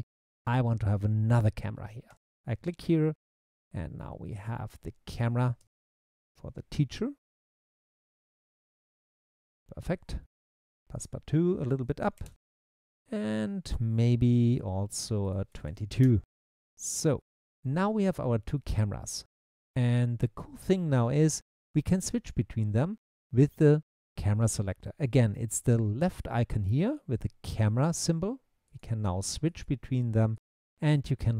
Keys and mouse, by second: 2.1 click, 2.2 middle click, 4.5 middle click, 4.6 click, 7.7-8.9 middle drag, 11.0 middle click, 11.8 click, 15.3 click, 15.7 2, 27.0 click, 27.8 click, 28.8 click, 29.5 click, 30.4 click.